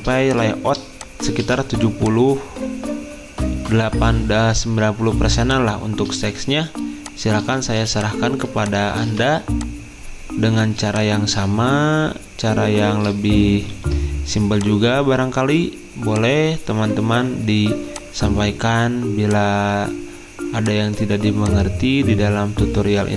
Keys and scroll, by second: 7.7 z, 13.5-14.2 typing.